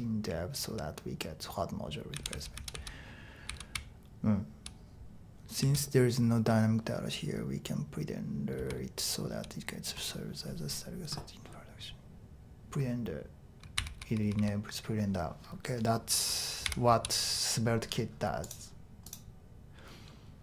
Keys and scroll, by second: 2.1-4.6 typing, 5.6 typing, 8.6-9.3 typing, 13.7-14.4 typing, 16.6 typing.